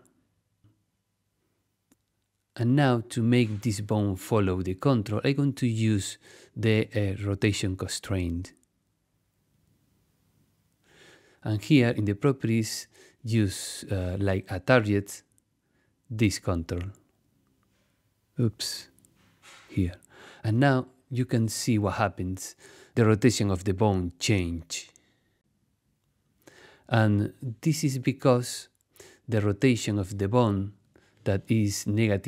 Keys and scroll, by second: 28.7 super+z.